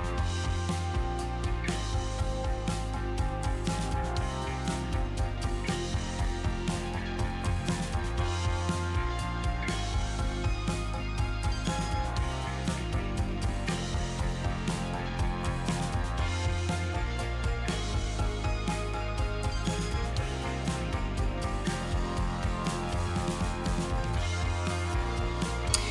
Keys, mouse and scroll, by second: 0.6 g, 5.4-8.3 drag, 12.7-20.1 middle drag, 20.1-22.0 drag.